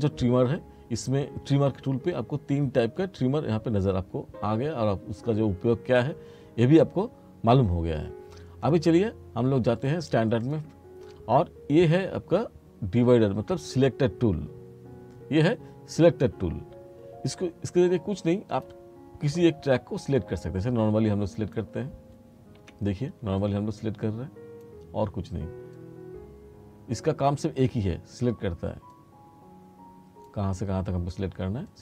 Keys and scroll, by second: 22.7 F2.